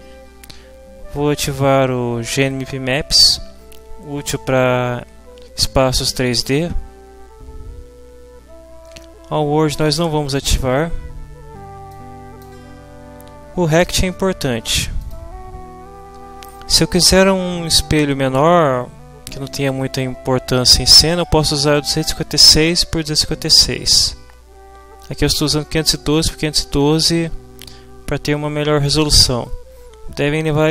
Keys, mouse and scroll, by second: 11.9-12.6 scroll up 1, 15.0 click.